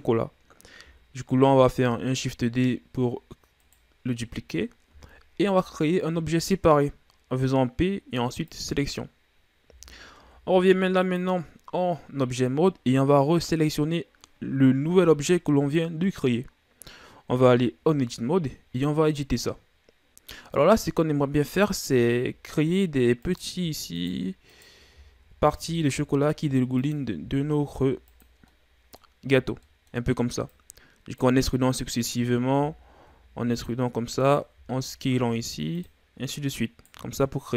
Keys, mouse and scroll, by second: 1.5 shift+d, 5.6 p, 9.6 z, 10.2 Tab, 11.0 right click, 17.2 Tab, 22.0-22.4 shift+scroll down 1, 22.4 scroll up 2, 23.2 right click, 24.0 shift+right click, 24.5 shift+right click, 25.0-25.6 shift+scroll down 2, 25.6 e, 28.3 scroll down 3, 28.5-29.5 middle drag, 29.5 ctrl+scroll down 2, 29.6 middle click, 30.5-31.5 drag, 31.5 middle click, 32.2 scroll up 1, 32.6 e, 34.2 alt+right click, 34.8 s, 36.2 right click, 37.2 right click.